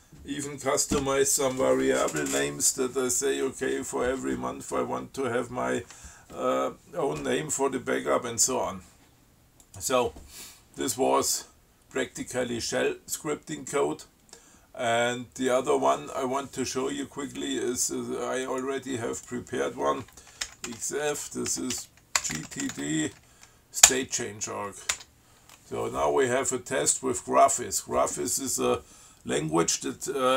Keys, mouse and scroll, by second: 9.9 click, 18.7 click, 19.4 click, 20.7 ctrl+x, 20.9 ctrl+f, 21.5-23.3 typing, 24.1 Return, 25.1 Tab.